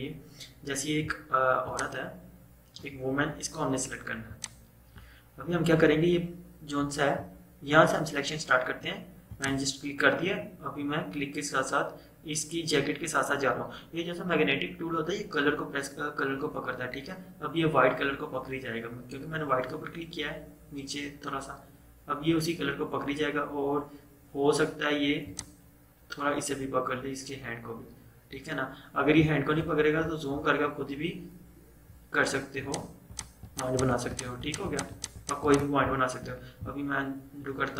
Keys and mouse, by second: 0.4 typing, 1.7-7.7 drag, 9.4 click, 25.4 click, 29.4-30.6 typing, 32.6 click, 36.0-37.0 typing.